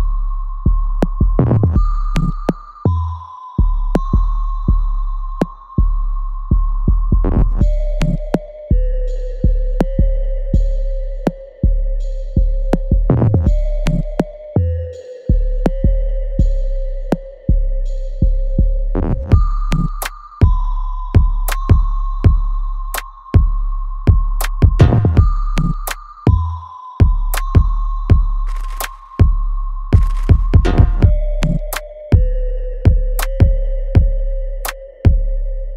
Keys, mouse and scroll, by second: 0.3 alt+middle click, 0.8 right click, 1.9 click, 2.6 scroll down 1, 3.7 alt+middle click, 4.8 click, 7.7 alt+click, 8.2 alt+middle click, 8.8 alt+click, 10.0 alt+click, 10.5 alt+middle click, 11.1-12.7 right drag, 12.7 click, 13.3-15.8 ctrl+right drag, 16.1 alt+click, 16.7 alt+middle click, 17.2-19.5 alt+drag, 19.5 ctrl+click, 20.6-23.3 alt+drag, 23.3-25.9 drag, 25.9 space, 26.8-27.2 scroll down 1, 27.2 space, 27.6 alt+middle click, 28.5-30.5 ctrl+drag, 30.5 space, 31.0 alt+click, 31.8 space, 32.3-34.5 alt+drag, 34.5 click, 35.2 alt+right click, 35.6 alt+click.